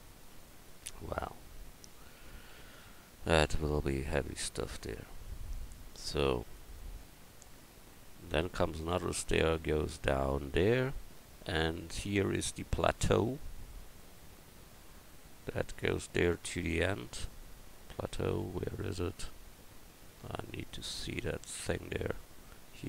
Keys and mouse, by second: 4.9 KP_1.